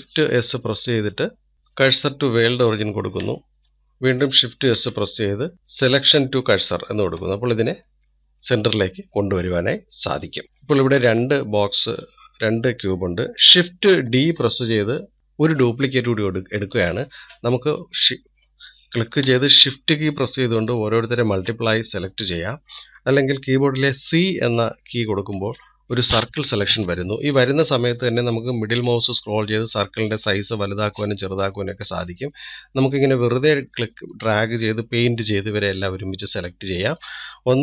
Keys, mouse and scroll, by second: 9.7-12.1 middle drag, 12.1 click, 13.2 click, 15.2-17.5 middle drag, 17.5 scroll up 1, 18.1 click, 18.8 click, 21.1 shift+click, 21.7 shift+click, 23.0 click.